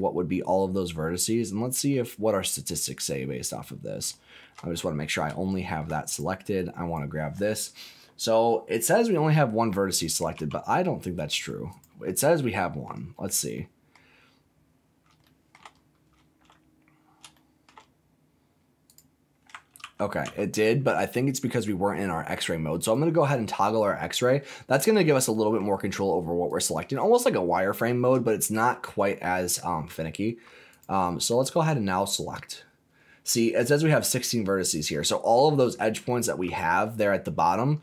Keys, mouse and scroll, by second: 0.3 middle click, 0.4-1.9 middle drag, 2.8 click, 3.5 scroll up 2, 4.1 shift+middle click, 4.7-5.2 scroll up 4, 5.4 shift+middle click, 6.0 click, 6.5 click, 10.3 g, 11.6 click, 12.1 scroll down 1, 12.3 middle click, 12.8-13.5 scroll down 4, 13.5 middle click, 13.9 middle click, 14.0 scroll down 1, 14.6-14.9 scroll up 2, 15.2 shift+middle click, 15.7 scroll up 2, 16.2-16.8 shift+scroll down 3, 17.3 shift+middle click, 17.9-18.8 scroll up 1, 18.8 click, 19.8 ctrl+z, 20.2 ctrl+z, 22.7 click, 23.4 scroll down 2, 23.7 middle click, 24.1 middle click, 25.2 middle click, 26.4 click, 27.2-28.0 scroll up 7, 28.2 shift+middle click, 29.0 shift+middle click, 29.6-30.4 shift+scroll up 4, 30.7 click, 31.2 click, 34.3-34.8 scroll down 4, 34.9 middle click, 35.3-36.0 scroll down 5, 36.0 shift+middle click, 36.6 middle click, 37.3-37.8 scroll up 7.